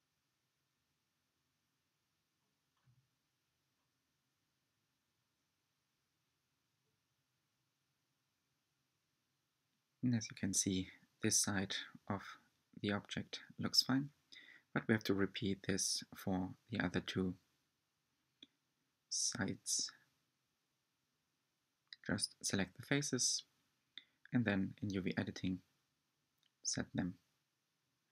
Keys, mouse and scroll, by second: 1.2 g, 8.7 click, 10.5 Tab, 11.3 scroll up 1, 11.8-15.5 middle drag, 18.8 Tab, 19.1 shift+click, 19.3 shift+click, 19.5 shift+click, 19.7-23.1 typing, 23.7 Tab, 23.8 scroll down 1, 23.8 middle click, 24.1 Tab, 24.1 scroll up 1, 24.2 shift+click, 24.5 shift+click, 25.0-26.7 typing, 25.0 scroll down 1, 27.5 Tab, 27.6 scroll down 1, 27.6-28.0 middle drag.